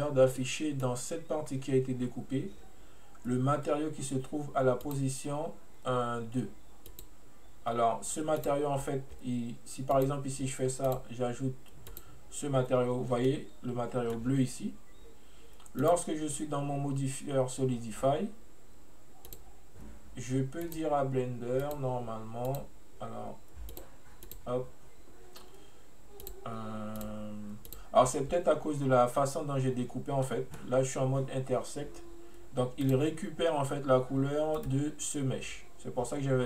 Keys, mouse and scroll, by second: 0.4-3.4 middle drag, 4.9-8.5 drag, 10.0-13.3 drag, 13.3-15.9 middle drag, 15.9 click, 19.3-23.9 drag, 24.3 click, 26.3 click, 27.0 click, 27.7 click, 30.3-32.9 middle drag, 32.9 click, 34.6 right click.